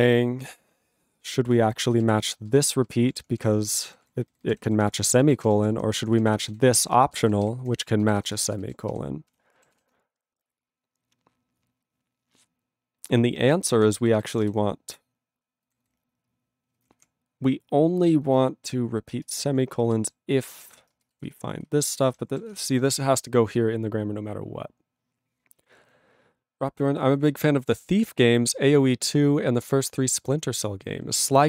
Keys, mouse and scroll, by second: 1.3 ctrl+p, 1.7 ctrl+n, 2.0 ctrl+e, 2.2 ctrl+space, 2.7 ctrl+alt+b, 3.0 ctrl+p, 3.7 ctrl+g, 3.9 ctrl+n, 4.5 ctrl+e, 4.6 ctrl+b, 4.9 ctrl+space, 5.3 ctrl+alt+b, 5.4 ctrl+g, 5.6 ctrl+p, 6.2 ctrl+b, 6.9 ctrl+space, 7.3 ctrl+alt+b, 7.5 ctrl+g, 7.6 ctrl+n, 7.8 ctrl+e, 8.0 ctrl+b, 8.3 ctrl+space, 8.7 ctrl+alt+b, 9.3 ctrl+g, 9.7 ctrl+s, 14.0 ctrl+b, 14.2 ctrl+p, 14.4 ctrl+b, 15.6 ctrl+n, 16.7 ctrl+p, 16.7 ctrl+f, 16.9 ctrl+p, 18.2 ctrl+n, 18.2 ctrl+f, 19.1 ctrl+space, 19.5 ctrl+alt+f, 19.8 ctrl+g, 20.4 ctrl+p, 20.4 ctrl+b, 20.9 ctrl+space, 21.3 ctrl+alt+f, 21.9 ctrl+g, 22.0 ctrl+n, 22.3 ctrl+a, 22.4 ctrl+space, 22.5 ctrl+e, 22.5 ctrl+g.